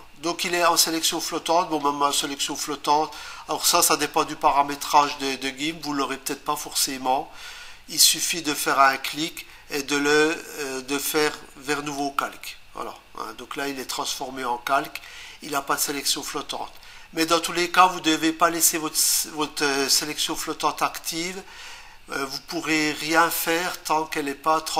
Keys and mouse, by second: 8.6 right click, 8.8 Down, 12.0 click.